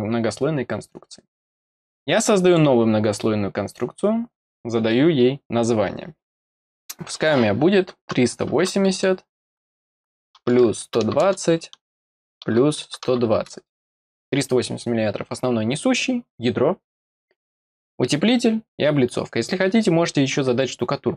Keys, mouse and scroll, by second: 2.4 click.